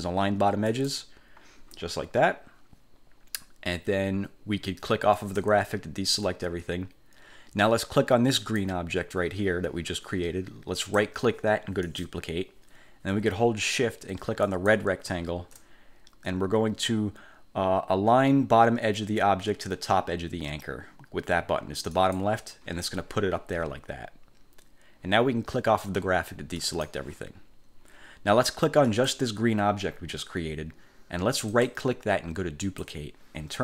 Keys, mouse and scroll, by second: 0.9 click, 5.3 click, 8.5 click, 10.9 click, 12.0 click, 14.6 shift+click, 22.1 click, 26.7 click, 29.0 click, 31.6 click, 32.7 click.